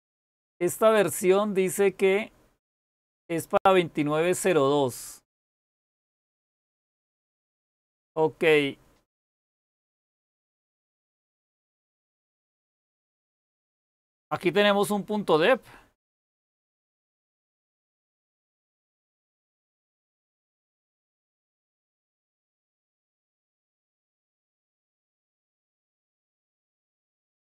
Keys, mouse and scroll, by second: 1.1-1.6 scroll up 1, 1.6-5.2 scroll up 1, 5.2-6.3 scroll up 1, 6.3-7.4 scroll up 1, 7.4-9.8 scroll up 1, 9.8-10.5 scroll up 1, 10.5-11.2 scroll up 1, 11.2-13.8 scroll up 1, 13.8-27.5 scroll up 1.